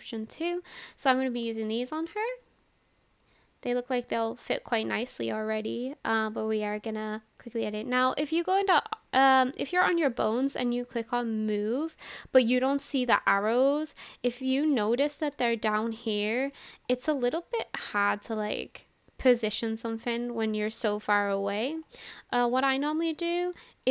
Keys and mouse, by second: 1.6 shift+middle click, 2.1-4.8 middle drag, 6.1-7.4 drag, 7.4-8.5 middle drag, 9.5-10.2 middle drag, 12.5-12.9 middle drag, 12.9 drag, 13.1-14.4 middle drag, 14.7-15.1 shift+middle drag, 15.4-15.8 shift+middle drag, 16.0-16.6 middle drag, 18.2-20.9 drag, 21.6 ctrl+z, 22.2-22.6 shift+middle drag, 22.8-23.3 middle drag, 23.6-23.9 shift+middle drag.